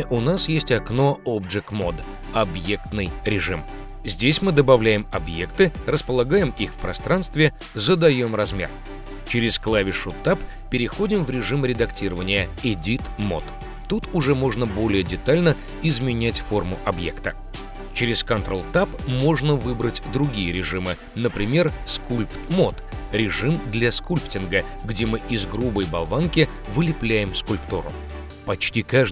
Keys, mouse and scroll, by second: 1.1-3.1 drag, 3.8 click, 5.2 ctrl+Tab, 9.3 Tab, 13.1 KP_Decimal, 14.5 shift+middle click, 15.9-18.2 drag, 18.1 Tab, 21.5 click, 22.3 click, 23.3 click, 23.7 click, 23.9 g, 24.0 f, 24.6 f, 24.9 click, 25.3 click, 25.7 click, 26.2 click, 26.6 click, 27.7 ctrl+Tab.